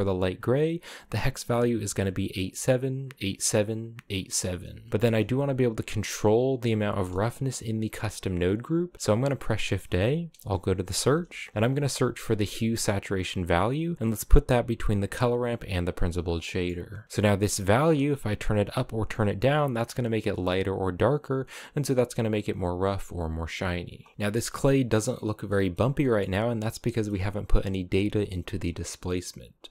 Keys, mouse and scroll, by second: 4.4-4.9 scroll down 1, 4.9-6.7 shift+middle drag, 6.7 scroll down 1, 6.8-8.2 middle drag, 8.2 click, 8.9 shift+a, 15.7 click, 16.1 middle click, 16.6 click, 16.9 middle click, 17.6-20.6 drag, 22.9 click, 23.2-24.1 scroll down 6, 24.1-25.1 shift+middle drag, 25.1 scroll up 1, 25.2 middle click, 25.5 scroll down 2, 25.9-26.3 middle drag, 26.3-28.2 scroll up 3, 26.6 middle click, 29.4 middle click.